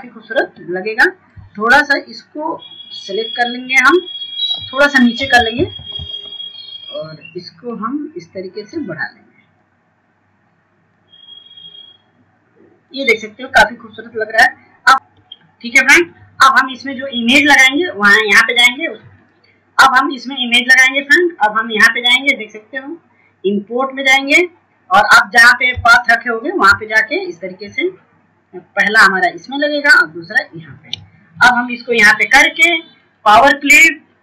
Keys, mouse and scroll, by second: 1.7 ctrl+space, 2.1 click, 2.7 scroll down 1, 3.3-8.5 drag, 9.1 Down, 10.2 click, 13.7 scroll up 1, 14.5-25.1 drag, 25.7-32.1 ctrl+drag.